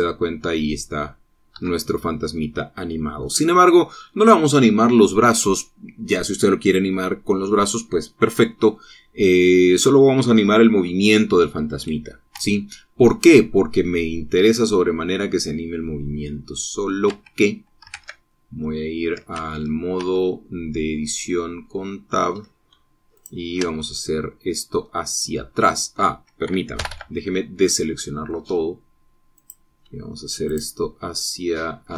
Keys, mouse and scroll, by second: 2.3 Escape, 3.2 click, 13.2 Tab, 13.9-17.8 drag, 17.9 Tab, 18.8 ctrl+Tab, 20.2 ctrl+Tab, 22.0-23.3 drag, 24.0 shift+click, 24.4-25.7 shift+drag, 26.4 click, 27.6 a, 28.5 click, 30.2 click, 31.3 shift+click.